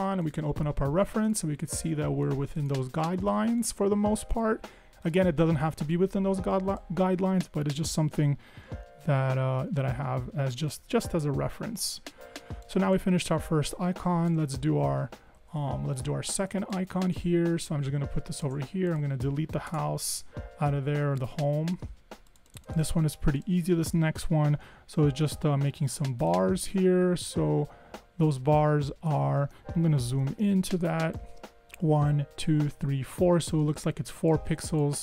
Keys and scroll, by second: 9.3 super+0, 10.5 super+=, 10.7 super+=, 11.0 super+=, 15.5 Escape, 15.6 Escape, 19.8 BackSpace, 24.9 r, 30.0 super+=.